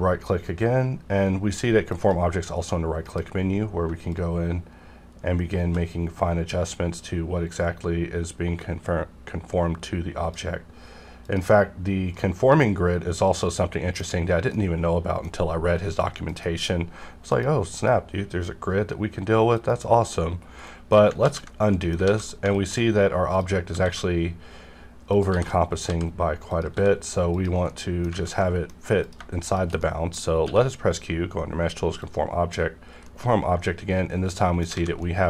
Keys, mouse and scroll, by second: 1.9 click, 3.0 F9, 4.1-11.2 shift+drag, 12.2-14.1 middle drag, 14.1 scroll up 1, 14.5-16.3 middle drag, 16.3 F9, 17.3 click, 20.4 scroll down 1, 20.7 middle click, 21.2 ctrl+z, 21.7 middle click, 22.0 alt+a, 22.3 middle click, 23.3 click, 23.3 click, 25.1 click, 25.3 g, 25.9 z, 26.5 click, 26.7 s, 27.3 click, 27.7 middle click, 28.1 alt+a, 28.4 middle click, 29.0 click, 29.4 shift+click, 29.8 middle click, 30.4 q, 32.0 click, 33.0 middle click, 34.0 scroll down 1, 34.7 alt+a, 35.0-35.2 middle drag.